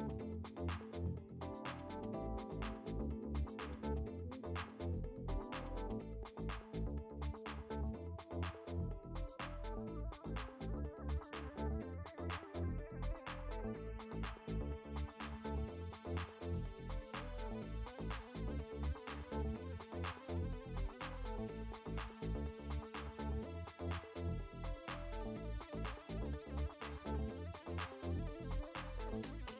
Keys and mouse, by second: 5.1 click, 9.3 click, 20.8 click, 23.8 click, 26.5 click, 28.1 space, 28.5 click.